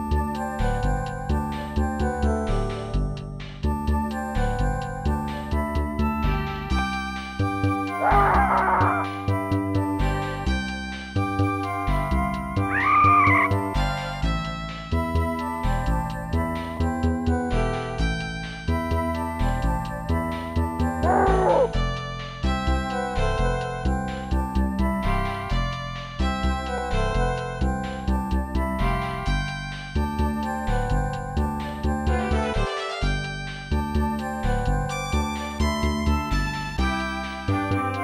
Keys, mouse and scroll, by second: 0.0 ctrl+s, 0.2 click, 1.0 scroll up 1, 2.2 right click, 2.6 right click, 3.0 right click, 3.3 right click, 4.3 scroll down 1, 6.9 scroll up 2, 8.5 click, 11.5 click, 13.0 click, 14.0-14.3 typing, 14.6 Return, 16.1 click, 17.5-18.2 typing, 18.4 Return, 19.8 click, 23.5 click, 27.8-28.5 typing, 28.9 Return, 30.2 ctrl+z, 35.8 click.